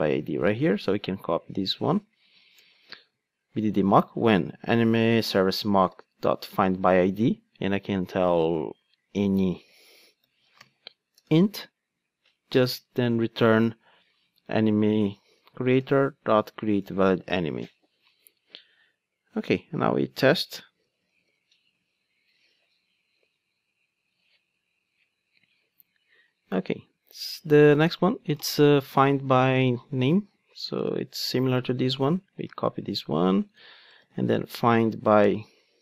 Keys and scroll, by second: 1.6 super+c, 2.8 super+v, 6.5 Return, 11.3 Return, 15.6 Return, 21.3 ctrl+d, 32.6 super+c, 34.0 super+v.